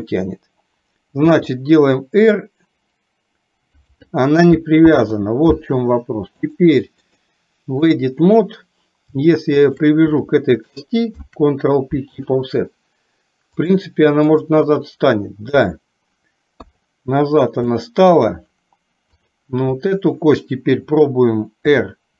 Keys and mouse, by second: 1.3 r, 4.9 ctrl+z, 6.5 click, 7.2 click, 9.7 shift+click, 11.2 ctrl+p, 13.7-14.7 drag, 16.5 KP_3, 17.8 shift+middle click, 19.2 click, 21.7 r.